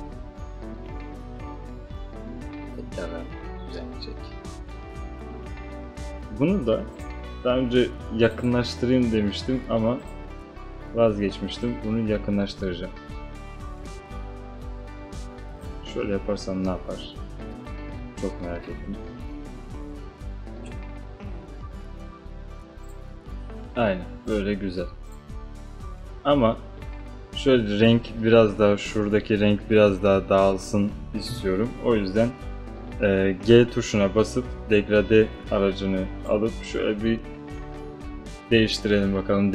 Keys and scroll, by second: 31.4 g.